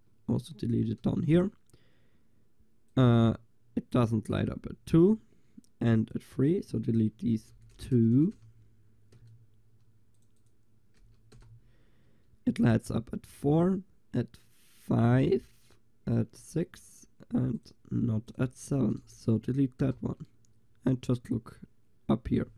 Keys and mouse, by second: 1.2 click, 2.9-7.8 drag, 7.8 BackSpace, 8.2 BackSpace, 10.2-11.6 drag, 11.7 click, 19.1 BackSpace.